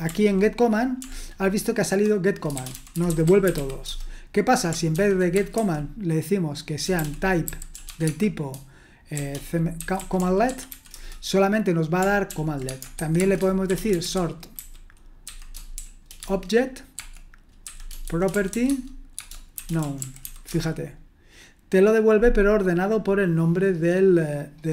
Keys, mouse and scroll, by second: 1.0 ctrl+BackSpace, 1.7-4.0 typing, 4.9 ctrl+p, 5.3-6.0 typing, 7.2-11.2 typing, 12.3 ctrl+p, 12.7-20.7 typing, 22.8-24.5 scroll up 2, 24.5-24.7 scroll up 1.